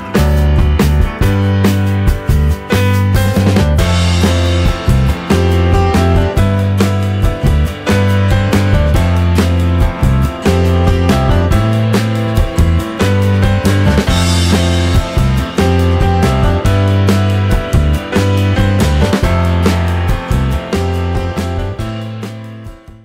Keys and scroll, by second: 5.1 Delete, 6.3 ctrl+c, 6.5 ctrl+v, 8.9-11.5 typing, 12.3 Right.